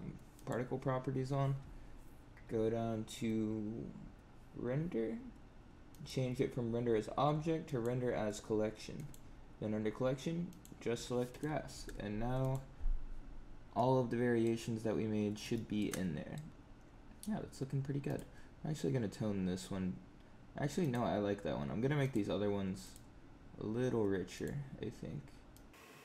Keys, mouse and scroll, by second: 0.3 click, 1.8-3.3 scroll down 10, 5.8 click, 11.2 click, 12.4 click, 13.8 middle click, 15.1 scroll up 2, 15.5 shift+middle click, 15.8 middle click, 17.0 scroll down 1, 18.0 click, 20.7 click, 21.9 click, 22.7 click, 24.3 click.